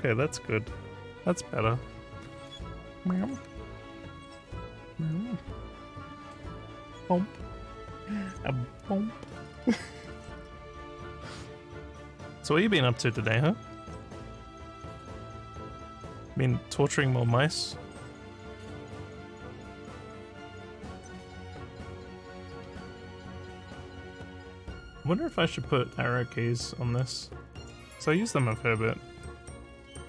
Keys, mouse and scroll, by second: 18.5 scroll down 1, 19.6 click.